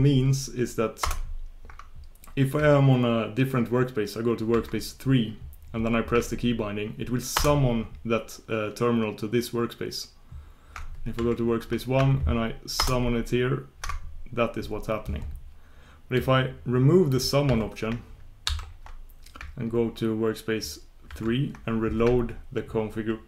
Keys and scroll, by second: 11.3 super+1, 20.4 shift+super+Return.